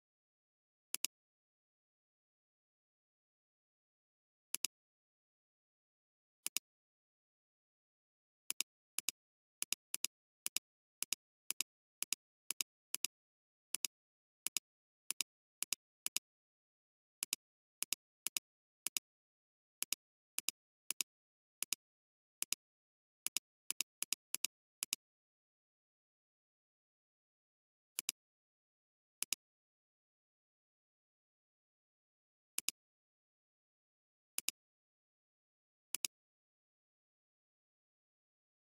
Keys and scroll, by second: 0.9 alt+space, 7.9 ], 8.0 ], 8.2 ], 8.3 ], 13.8 space, 18.3 space, 28.0 alt+space, 29.2 space, 32.5 alt+space, 34.5 space.